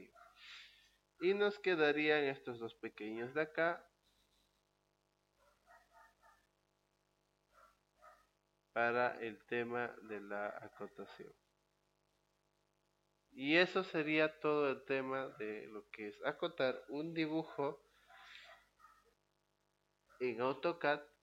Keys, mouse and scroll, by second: 4.3 click, 6.7 click, 7.8 click, 9.4 click, 11.4 click, 12.9 click.